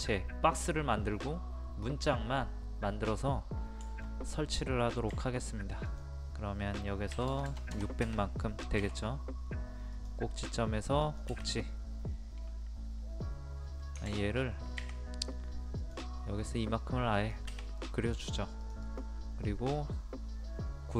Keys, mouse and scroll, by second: 3.9 shift+middle click, 5.1 t, 5.9 click, 7.1 KP_6, 9.9 click, 10.1 click, 15.8 click, 17.8 middle click, 18.2-18.7 scroll down 1, 18.7 click, 19.5-20.7 middle drag.